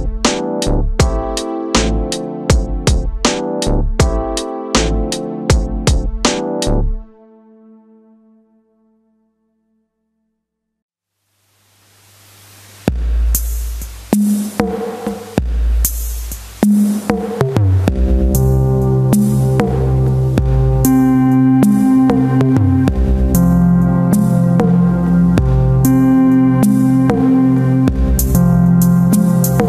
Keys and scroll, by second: 0.3 s, 0.5 space, 2.7 space, 7.9 space, 10.3 space, 15.5 space, 16.2 ctrl+KP_Subtract, 17.2 alt+i, 17.5 a, 17.8 s, 19.8 Return, 20.3 space, 25.2 space, 27.1 Return, 28.5 alt+space, 29.2 c.